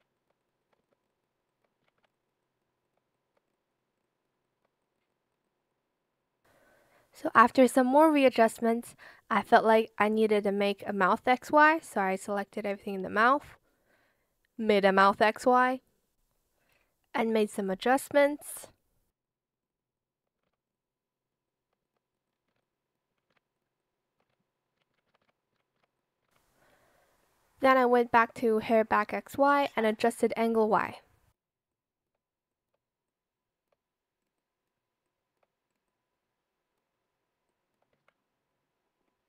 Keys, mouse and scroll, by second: 0.0 shift+click, 1.8 ctrl+z, 2.8 shift+click, 3.1 shift+click, 4.4 shift+click, 9.2 Escape, 12.0-12.8 typing, 14.9 shift+click, 16.1 shift+click, 17.5 shift+click, 19.0 Return, 20.2 shift+click, 20.4 ctrl+z, 22.3 Return, 22.5 Escape, 23.1 ctrl+z, 23.7 shift+click, 24.2 Escape, 24.7 ctrl+z, 24.9 ctrl+z, 25.5 ctrl+z, 26.2 ctrl+z, 26.6 Escape, 29.5 shift+click, 31.6 shift+click, 32.4 shift+click, 33.0 shift+click, 35.0 shift+click, 37.4 shift+click, 37.9 ctrl+z.